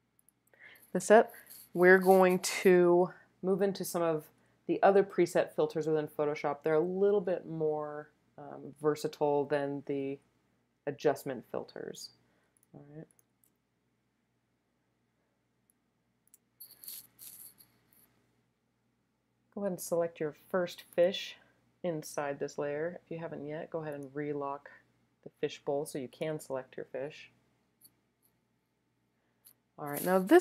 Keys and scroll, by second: 12.7 super+space, 15.5 space, 16.0 space, 16.1 space, 16.2 space, 17.9 space.